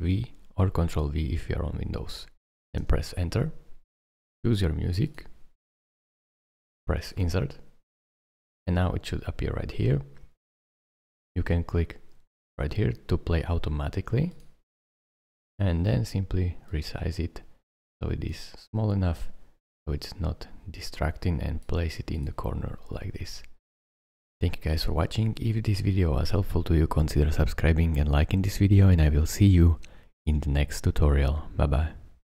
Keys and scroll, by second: 2.8 Return.